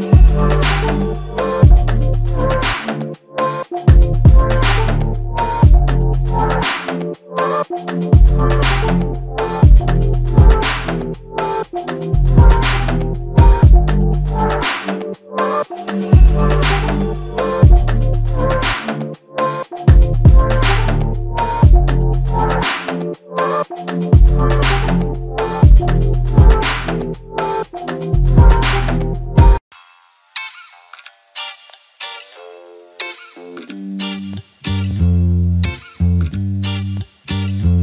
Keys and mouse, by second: 3.7 shift+click, 6.1 shift+click, 12.0 double click, 22.1-23.4 typing, 29.1-29.8 typing, 29.5 shift+click, 30.9 shift+click, 33.5 shift+click, 37.5 shift+click.